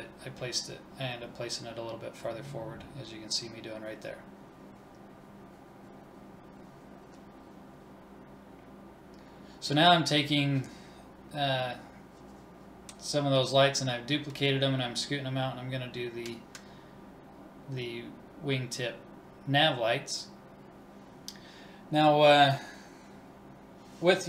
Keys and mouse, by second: 0.0 click, 0.0 middle click, 0.6 click, 0.8 KP_3, 1.8 middle click, 2.0 click, 4.1 click, 4.9 a, 5.1 shift+s, 5.6 ctrl+s, 6.4-9.1 drag, 9.1 middle click, 9.2 click, 10.1 middle click, 10.6 KP_1, 11.4 shift+d, 12.8 KP_3, 13.1 middle click, 13.4 click, 13.7 middle click, 14.1 click, 15.3 middle click, 16.0 middle click, 16.3-17.4 middle drag, 17.4 click, 18.6 Left, 18.6 BackSpace, 19.0 BackSpace, 21.2 middle click, 22.1 click, 23.4 Right, 23.4 BackSpace, 23.9 BackSpace.